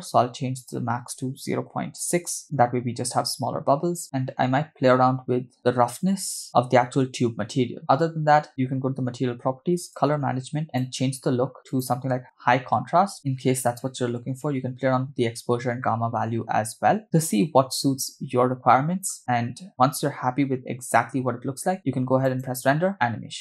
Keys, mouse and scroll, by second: 0.6-2.4 drag, 4.0 space, 4.1 click, 8.5 click, 9.5-9.8 scroll down 2, 9.9 click, 10.2-10.7 scroll down 2, 10.7-12.2 drag, 13.0 space, 22.3-23.4 drag.